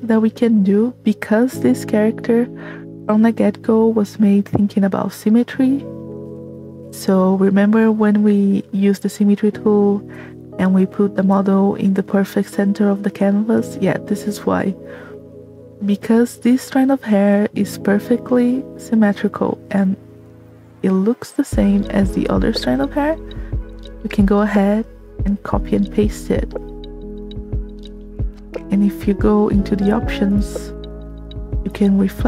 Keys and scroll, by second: 1.5 space, 15.3 space, 30.2 v.